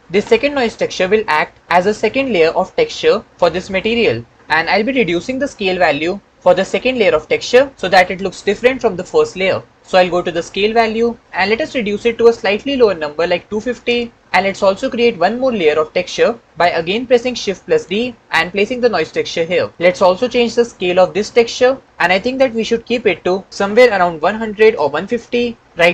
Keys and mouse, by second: 6.3 click, 10.9-13.8 drag, 17.3 shift+d, 19.5 click, 21.0 shift+middle click, 23.5-25.1 drag, 24.5 KP_0.